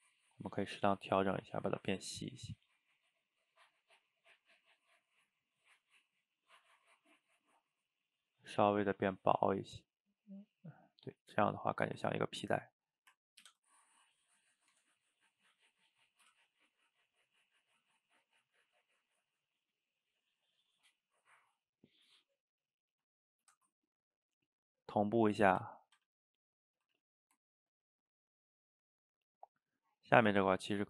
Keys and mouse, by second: 0.8-3.1 shift+drag, 3.1-6.5 shift+middle drag, 6.7-8.7 ctrl+shift+middle drag, 8.7-11.0 shift+drag, 11.0-13.5 middle drag, 13.5 ctrl+c, 14.8 Tab, 15.2 click, 16.2 ctrl+v, 17.5-18.3 middle drag, 18.3 a, 18.4 a, 18.6-20.9 middle drag, 20.9 drag, 22.6 click, 23.5 ctrl+c, 24.3 click, 25.6 ctrl+v, 25.9 a, 26.1 a, 26.4 middle click, 26.8 a, 27.0 a, 27.1-29.9 middle drag, 29.9 click, 30.3 shift+right click, 30.6-30.8 ctrl+middle drag.